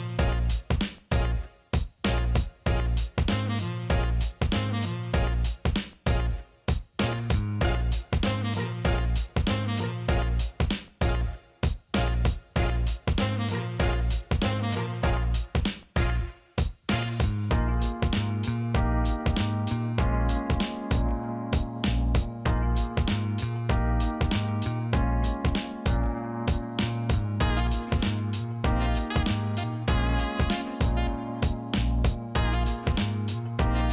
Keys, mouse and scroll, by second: 0.0 alt+middle click, 0.6 alt+shift+middle click, 0.7 alt+middle click, 2.9 e, 4.7 click, 5.6 click, 5.8-9.8 drag, 10.0 alt+middle click, 11.2 Tab, 12.0-14.1 drag, 14.3 alt+middle click, 15.0 alt+middle click, 15.3 alt+shift+middle click, 15.5 ctrl+alt+middle click, 16.0 alt+middle click, 16.8 Tab, 17.3 middle click, 18.1 click, 18.6 click, 18.8-20.2 alt+middle drag, 20.7 click, 22.1 click, 23.0 click, 23.8 alt+middle click, 24.7 click, 25.6 click, 26.3 ctrl+z, 27.3 e, 28.2-33.5 drag, 33.8 alt+middle click.